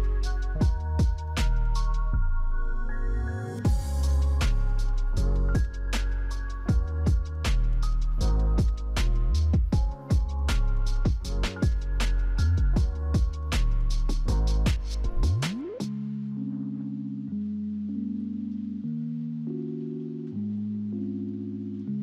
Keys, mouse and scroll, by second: 0.0-0.7 scroll up 3, 0.7 middle click, 2.3 scroll down 1, 2.9-3.7 scroll down 2, 4.2-5.3 scroll down 1, 5.3-5.9 scroll down 1, 7.3 double click, 7.5 0, 7.8 Return.